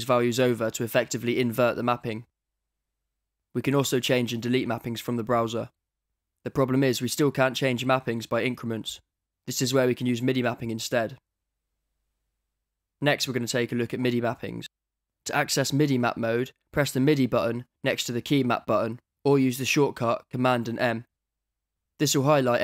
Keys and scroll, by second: 5.7 d, 18.3 super+m.